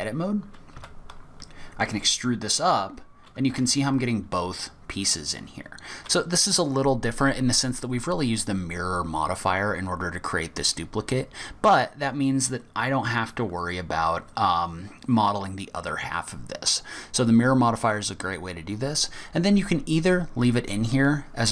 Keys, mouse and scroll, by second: 0.8 a, 1.8 e, 5.8 scroll down 2, 13.0-14.2 scroll up 8, 14.5-14.9 scroll down 3, 18.5-21.3 scroll down 2.